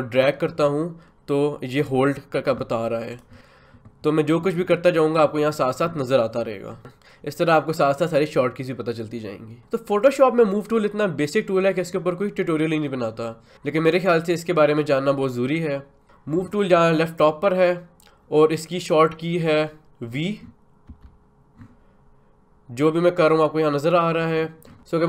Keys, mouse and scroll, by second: 20.9 v, 24.7 click.